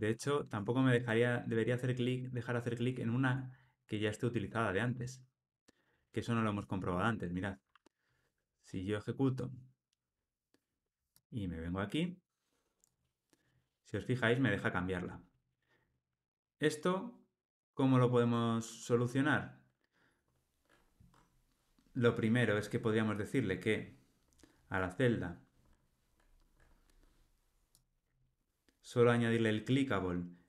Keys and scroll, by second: 7.3 ctrl+r.